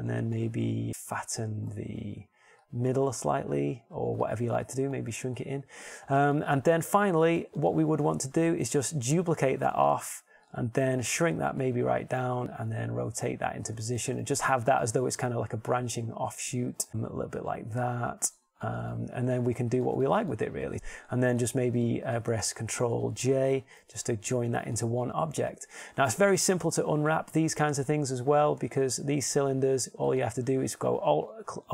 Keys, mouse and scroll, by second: 0.2 s, 3.4 a, 4.3 b, 5.1 s, 6.2 click, 7.5 Tab, 11.6 shift+d, 12.5 s, 12.9 g, 14.5 r, 16.9 g, 19.7 g, 25.9 ctrl+j, 29.7 Tab, 30.7 ctrl+Tab.